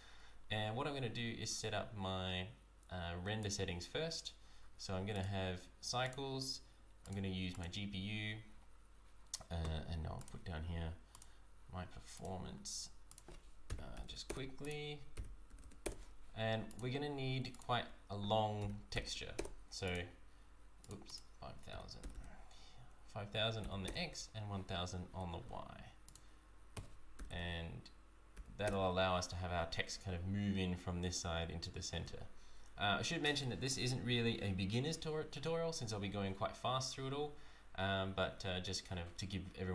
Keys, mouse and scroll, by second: 3.4 click, 5.1 click, 10.2 click, 11.1 click, 12.5 click, 12.5-13.1 scroll down 1, 13.1 click, 14.0 KP_0, 14.6 click, 15.6 KP_0, 16.6 click, 17.5 click, 19.0 KP_0, 19.8 click, 21.0 click, 22.1 KP_0, 26.0 click, 27.2 KP_0.